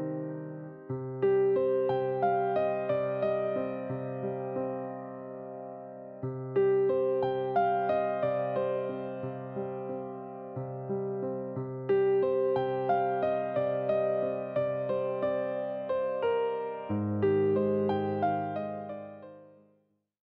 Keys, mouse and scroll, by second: 2.9-3.8 ctrl+z, 4.1 ctrl+z, 4.7-5.6 drag, 5.6 ctrl+right click, 7.3 ctrl+right click, 8.2 click, 13.6 KP_Enter, 15.8 click, 19.4 ctrl+z, 19.8 ctrl+z.